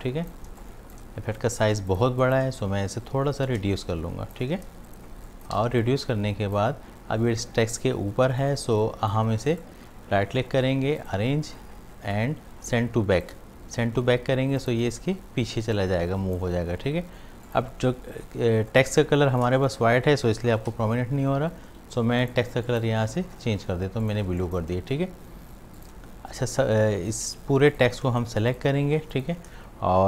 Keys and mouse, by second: 0.0-2.5 typing, 0.0 click, 0.6 click, 1.4 click, 1.9 ctrl+click, 3.5 alt+click, 4.7 ctrl+shift+space, 4.9 ctrl+click, 5.6 v, 5.9-8.3 drag, 8.3 space, 8.4 click, 8.8 space, 9.5 right click, 11.0 click, 13.2-19.7 drag, 20.7 i, 21.7 typing, 22.2 click, 24.3 space, 24.4 click, 28.5 shift+click.